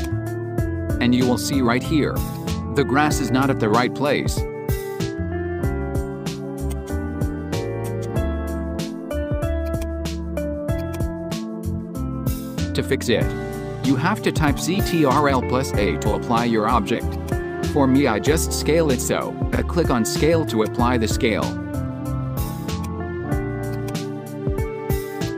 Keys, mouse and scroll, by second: 2.3-5.8 drag, 6.8 right click, 8.0 right click, 9.7 click, 10.8-13.3 drag, 14.4 click, 15.3 right click, 17.2 click, 18.6 ctrl+a, 22.7 click, 25.3 click.